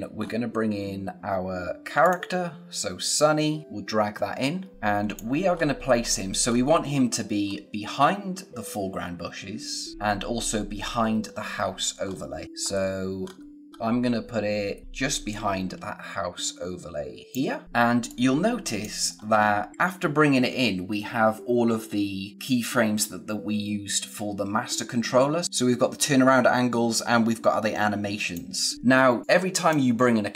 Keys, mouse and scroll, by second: 0.2-2.0 scroll up 1, 2.0 click, 5.5 scroll up 1, 6.0-6.4 scroll down 1, 6.4-7.0 scroll up 1, 7.0-7.4 scroll down 1, 7.4-9.9 scroll up 1, 12.0-12.4 scroll up 1, 12.4 click, 13.2-14.8 scroll up 1, 14.8 space, 18.0 click, 19.0 scroll down 1, 25.4 click.